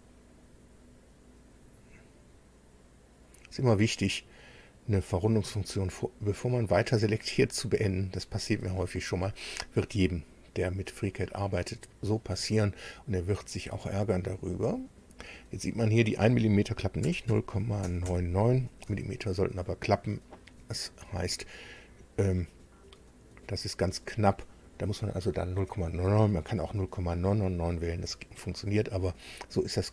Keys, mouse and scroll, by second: 0.3 ctrl+click, 1.4 ctrl+click, 3.2 ctrl+click, 4.0 ctrl+click, 6.0 ctrl+click, 7.2 ctrl+click, 14.5 click, 17.0 KP_0, 17.3 KP_Decimal, 17.8 KP_9, 18.0 KP_9, 18.8 Tab, 23.8-24.2 scroll down 2, 28.7-29.0 scroll up 2.